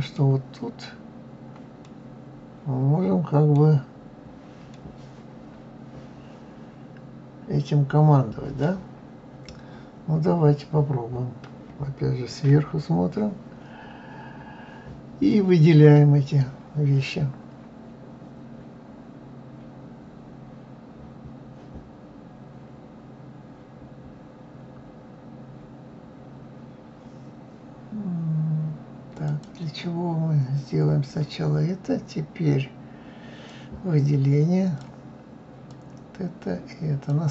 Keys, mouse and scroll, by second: 12.5 KP_7, 29.2-31.0 drag, 33.4-37.3 drag.